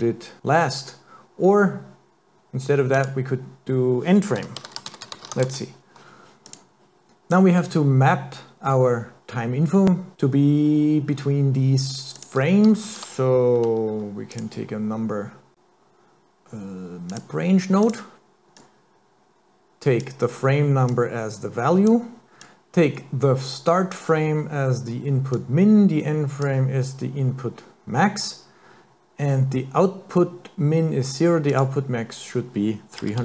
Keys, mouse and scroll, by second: 3.0 click, 6.5 click, 7.4 click, 12.2 click, 12.9 shift+a, 18.6 click, 20.9 click, 22.4 click, 25.3 click, 32.0 click.